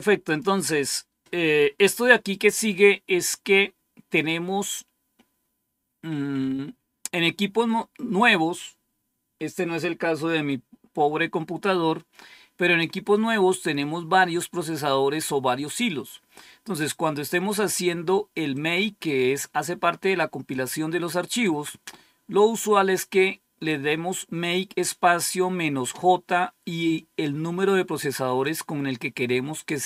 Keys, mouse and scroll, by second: 0.1 click, 5.3-5.8 scroll down 1, 18.5-20.5 drag, 21.2 click, 26.7-28.4 drag.